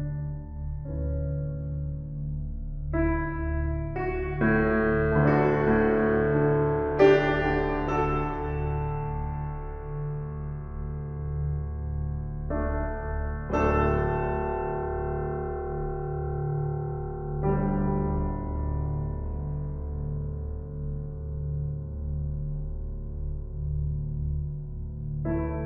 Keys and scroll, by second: 4.1 Up, 15.8 Down.